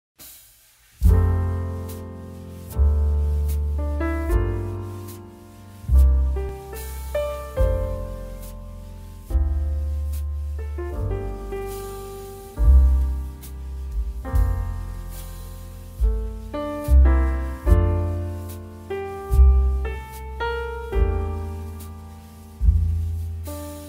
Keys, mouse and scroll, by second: 2.0 click, 3.8 click, 6.1 alt+Delete, 7.6 ctrl+d, 7.8 typing, 9.8 click, 12.2-12.7 typing, 12.4 click, 16.4 click, 17.7 click, 19.4 click, 20.4 click, 20.7-21.5 typing, 21.1 click, 22.7 click.